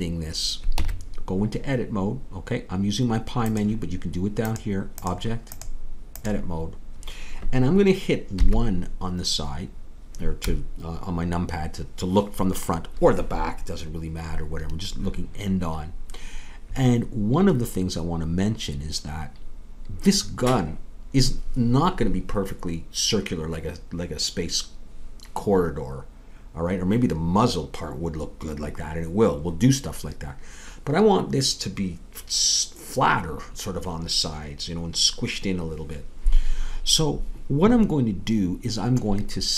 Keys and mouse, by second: 0.7 Tab, 8.4 KP_1.